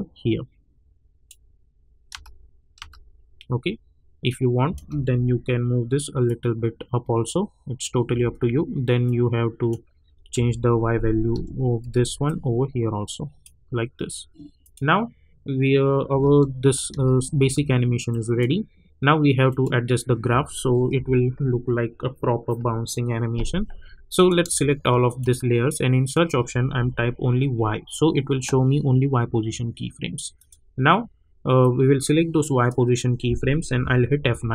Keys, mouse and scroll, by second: 2.1 space, 4.2 click, 5.1 j, 6.2-8.1 drag, 8.1 h, 9.3 click, 10.3 j, 11.3 c, 11.8 v, 12.2-14.6 drag, 16.1 space, 18.1 click, 20.9 =, 24.1 click, 25.0 shift+click, 26.8 y, 30.3 click, 30.7 scroll down 1, 31.6-34.2 drag, 34.2 F9.